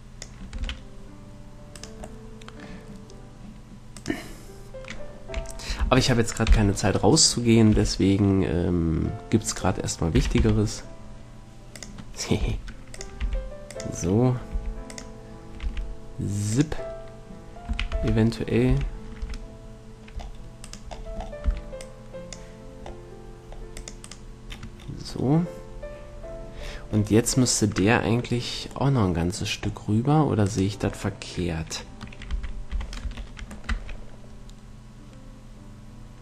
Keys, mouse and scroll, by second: 0.9 a, 2.2 right click, 5.9 right click, 6.2 ctrl+l, 6.8 KP_7, 8.1 g, 10.5 r, 12.7 g, 13.5 r, 14.0-15.1 drag, 14.8 g, 15.9-18.6 drag, 15.9 r, 18.0 a, 18.4 v, 19.0 v, 19.5 c, 21.2-23.0 middle drag, 21.7 c, 27.3-32.6 middle drag, 32.6 z, 33.1 z, 33.5 Tab, 34.0 a.